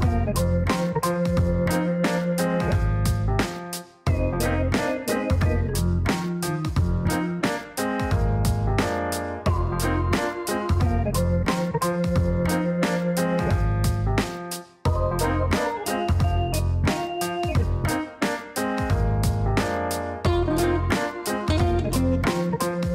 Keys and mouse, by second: 4.0 click, 5.2 click, 6.6 click, 7.8 KP_1, 7.9 KP_0, 8.0 KP_0, 8.3 KP_Enter, 11.6 click, 12.6 KP_5, 12.7 KP_0, 12.9 KP_Enter, 16.0 click, 17.6 KP_9, 17.7 KP_0, 18.0 KP_Enter.